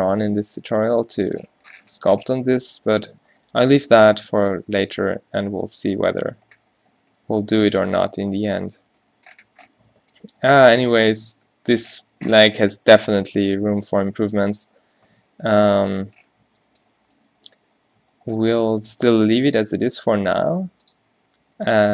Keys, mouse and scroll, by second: 0.1 g, 0.9 g, 3.1-4.5 drag, 3.3 g, 4.0 g, 5.1 click, 5.1 g, 6.2 Tab, 7.1 a, 7.5 a, 8.9 Tab, 11.6-12.6 drag, 11.6 g, 13.9 Tab, 14.5 a, 15.2 a, 16.5 Tab, 19.1 g.